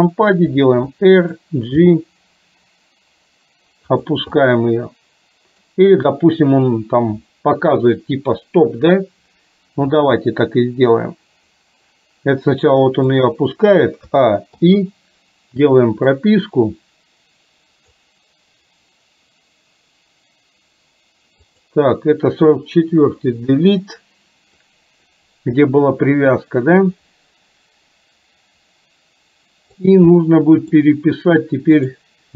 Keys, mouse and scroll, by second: 0.6 r, 1.8 g, 4.4-5.7 middle drag, 9.9 r, 14.2 a, 14.6 i, 16.2-18.1 drag, 21.6 click, 23.2 Delete, 24.7-29.8 drag, 30.3-30.8 middle drag, 31.8 click.